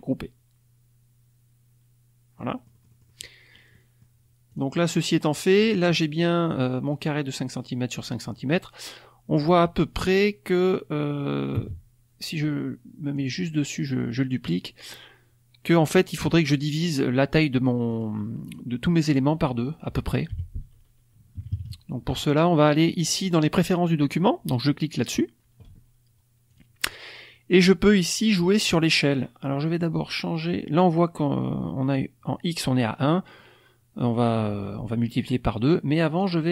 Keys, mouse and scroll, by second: 2.3-3.3 middle drag, 2.3-3.7 scroll up 1, 3.7 middle click, 4.4 click, 7.8 middle click, 8.3 scroll up 2, 8.3-13.3 drag, 11.5 space, 14.3 middle click, 17.8 click, 18.4 click, 20.2 Delete, 21.3 KP_Subtract, 22.6 click, 24.9 click, 26.5 click, 36.2-36.5 drag.